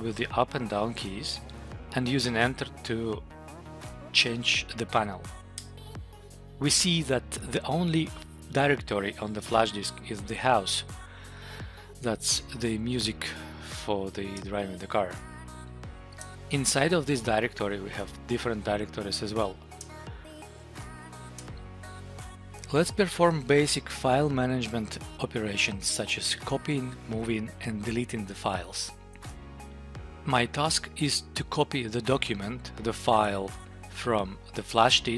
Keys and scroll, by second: 0.2 Up, 0.5 Down, 1.2 Up, 5.5 Return, 6.4 Up, 14.3 Return, 17.5 Down, 18.7 Up, 19.6 Return, 29.1 Tab.